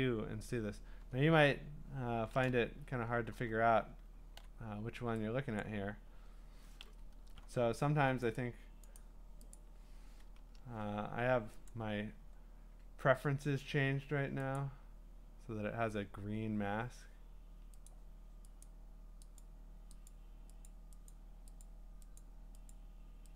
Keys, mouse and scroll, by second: 3.3 b, 4.4 x, 5.6 click, 6.8 ], 7.3 ], 7.5 ], 8.4 right click, 9.0 right click, 9.6 click, 11.7 click, 12.9 click, 14.6 click, 17.9 click, 18.6 click, 19.4 click, 20.1 click, 20.7 click, 21.1 click, 21.6 click, 22.2 click, 22.7 click.